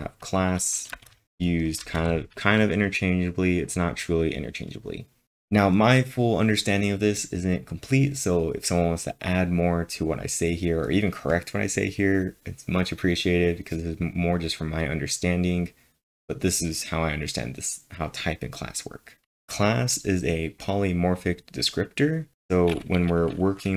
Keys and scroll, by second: 0.7-2.0 typing.